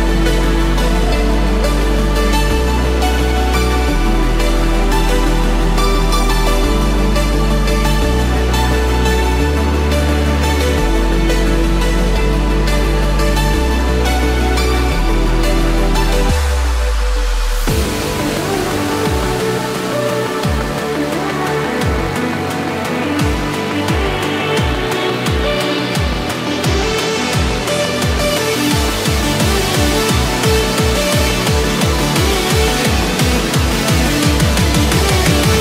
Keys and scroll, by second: 1.6 ctrl+-, 2.6 ctrl+=, 4.9 ctrl+-, 5.3 ctrl+0, 9.8 ctrl+=, 12.1 ctrl+-, 12.8 ctrl+0, 25.7 Return.